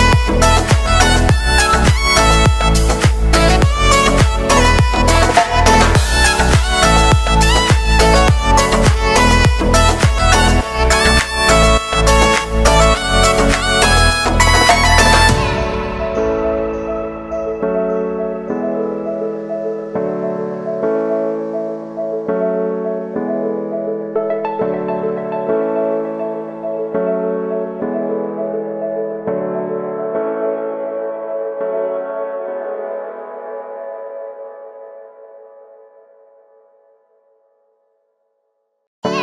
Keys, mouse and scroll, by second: 0.0-0.1 typing, 1.0 click, 4.3-10.5 drag, 10.5 ctrl+z, 10.9-24.0 drag, 26.0 Return, 28.0-30.5 drag, 33.3 ctrl+z, 34.3 click, 36.2 ctrl+z, 38.2-39.2 drag.